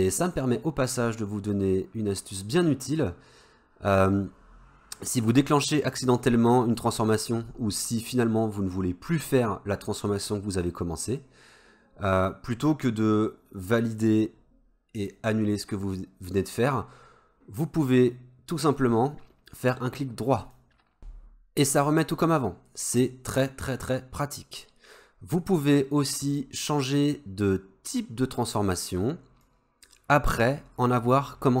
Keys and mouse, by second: 15.0-16.1 drag, 17.6-20.6 drag, 29.5-31.6 drag.